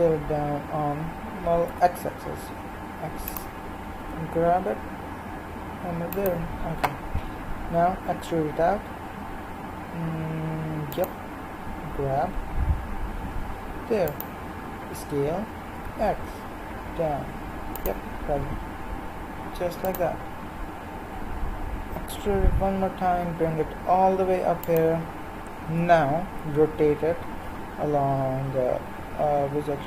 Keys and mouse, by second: 4.0 g, 7.6 e, 11.9 g, 14.9 s, 18.8 g, 21.2 e, 25.8 r.